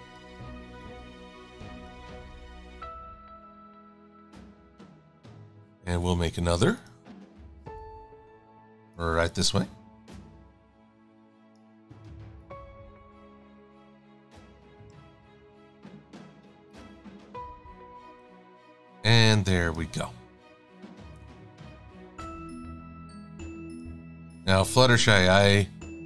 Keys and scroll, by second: 3.5 a, 9.1 e, 12.0 a.